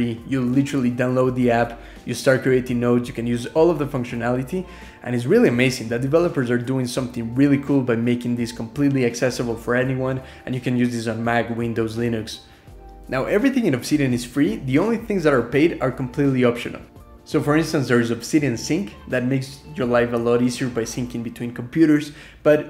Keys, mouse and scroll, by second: 6.3 ctrl+alt+2.